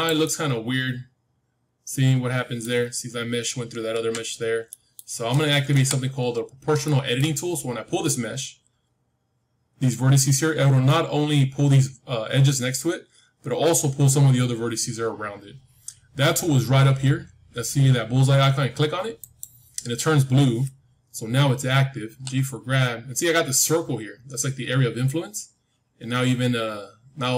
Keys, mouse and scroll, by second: 0.2-2.2 middle drag, 3.8 ctrl+z, 4.2-6.6 middle drag, 5.6 KP_1, 6.6 scroll up 1, 6.8-8.8 middle drag, 19.1-21.6 drag, 22.0 g.